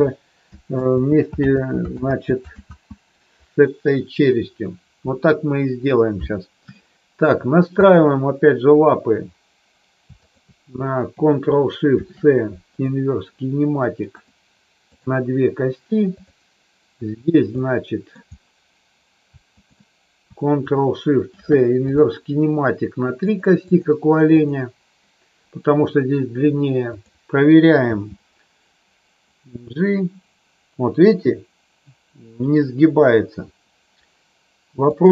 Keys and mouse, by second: 0.8 ctrl+z, 1.4 ctrl+z, 6.8 shift+middle click, 7.7 click, 12.8 ctrl+shift+c, 14.8 click, 17.7 middle click, 19.4 shift+click, 23.3 click, 23.5 click, 24.4 click, 26.9 click, 27.8 g, 34.9 click.